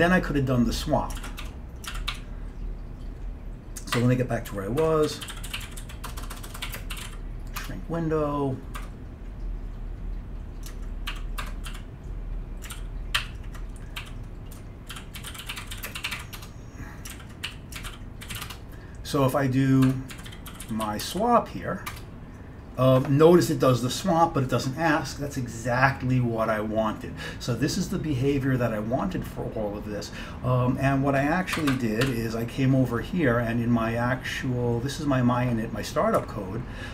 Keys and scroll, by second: 1.3 ctrl+x, 1.5 1, 2.0 ctrl+x, 2.2 2, 4.1 Escape, 4.6-8.9 typing, 4.9 Escape, 8.9 Escape, 11.0-21.7 typing, 13.3 ctrl+u, 14.6 Escape, 17.2 ctrl+x, 19.9 Escape, 22.0 Return, 31.6 Escape, 31.8 Escape, 32.1 c, 36.3 Up, 36.8-36.9 Up.